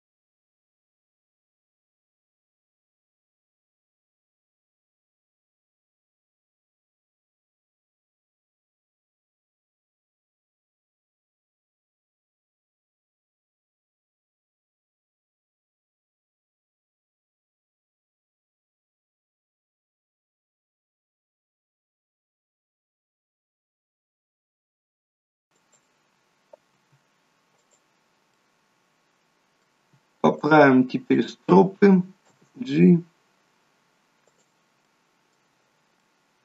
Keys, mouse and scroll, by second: 0.2 KP_0, 1.1 middle click, 2.1 middle click, 2.6 click, 3.9 g, 5.6 r, 6.8 click, 7.0 middle click, 8.0 g, 10.1 r, 11.2 g, 12.3 middle click, 13.0 scroll up 4, 13.3 middle click, 14.1 middle click, 14.8 middle click, 15.4 click, 16.1 middle click, 17.8 g, 18.6 click, 18.9 g, 19.6 middle click, 20.6 click, 21.4 g, 22.4 click, 22.8 g, 24.0 middle click, 24.5 g, 26.8 r, 28.4 middle click, 30.4 click, 31.2 shift+click, 32.5 g, 34.9 middle click, 36.0 middle click.